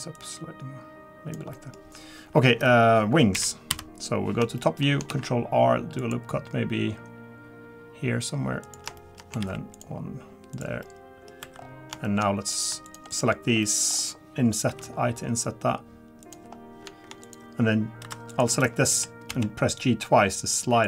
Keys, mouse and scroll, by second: 0.1 click, 1.5 middle click, 3.3 KP_4, 3.4 KP_7, 3.7 KP_7, 4.6 shift+middle click, 5.1 ctrl+r, 9.0 shift+middle click, 9.4 ctrl+r, 10.8 middle click, 11.4 3, 11.5-11.9 scroll up 4, 12.0 middle click, 12.2 scroll up 1, 12.5 click, 12.8 shift+click, 13.1 click, 13.6 middle click, 13.8-14.7 scroll down 3, 14.7 i, 16.5 scroll up 3, 17.2 click, 18.0 2, 18.3 click, 18.9 g.